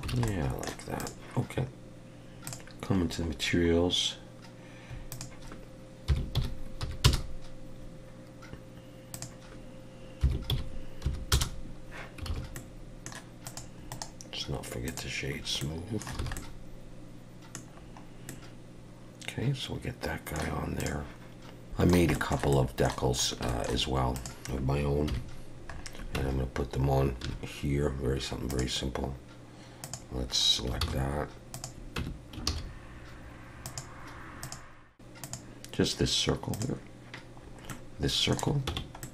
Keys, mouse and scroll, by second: 0.1 alt+a, 0.3 middle click, 1.0 click, 2.5 click, 3.0-5.1 scroll down 8, 5.1 click, 9.1 click, 12.3 alt+a, 12.5 middle click, 13.5 click, 13.9 right click, 15.3 scroll up 2, 15.6 middle click, 16.2 alt+a, 16.4 middle click, 17.7 scroll down 4, 18.3 middle click, 19.5 middle click, 20.8 click, 21.7 shift+middle click, 22.1 shift+middle click, 22.5 middle click, 23.2 scroll up 1, 23.5 middle click, 24.1 click, 25.1 KP_1, 25.7-26.2 scroll up 4, 26.2 Tab, 27.2 1, 28.5 click, 29.8 click, 30.8 shift+s, 32.0 Tab, 32.5 shift+a, 37.4 scroll down 3, 37.7 middle click, 38.7 Tab, 39.0 middle click.